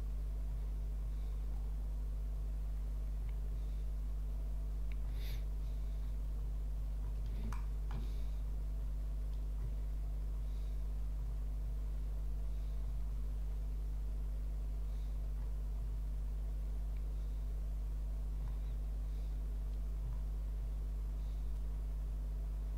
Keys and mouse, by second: 7.5 shift+middle click.